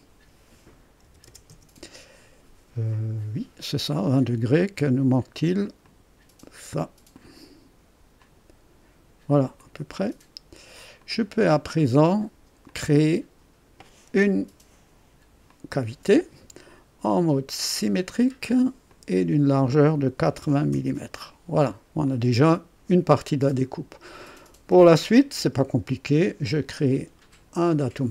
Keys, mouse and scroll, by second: 1.0 KP_2, 1.2 KP_0, 1.5 Return, 5.8 click, 7.1 click, 8.2 click, 9.5 click, 10.9 click, 12.7-14.0 drag, 15.4 click, 17.9 click, 18.9 click, 20.1 KP_8, 20.4 KP_0, 20.7 KP_Enter, 22.0-24.2 drag, 24.4 click, 26.2 click, 27.7 click.